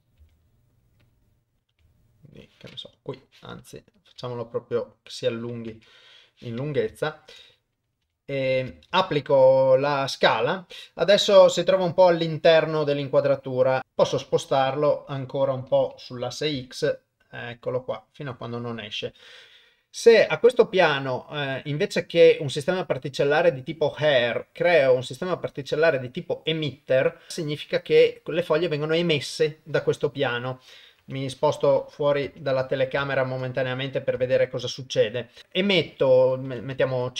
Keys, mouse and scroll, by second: 0.2 g, 1.2 middle click, 1.7 g, 3.4 middle click, 4.2 s, 5.7 KP_0, 8.0 g, 13.8 click, 14.0 g, 22.6 click, 27.3-30.4 middle drag, 31.0 KP_0, 32.3 KP_0, 33.1 ctrl+middle click, 33.5 middle click, 34.3 shift+middle click, 34.7 middle click, 36.1-37.1 drag, 36.9 KP_0.